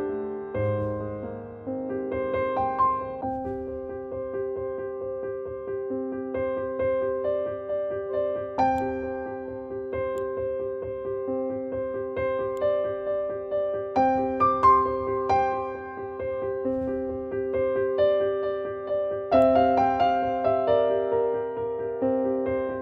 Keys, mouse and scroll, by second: 8.7 click, 10.0 click, 12.4-17.5 drag, 19.3-22.8 drag.